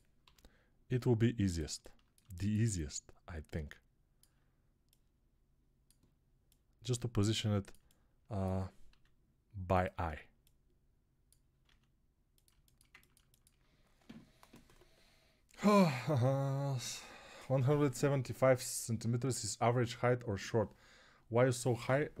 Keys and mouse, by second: 0.1-1.5 drag, 0.1 g, 1.5-7.6 ctrl+alt+middle drag, 7.6-12.4 alt+drag, 8.7 s, 11.5 s, 12.4-22.2 alt+shift+middle drag.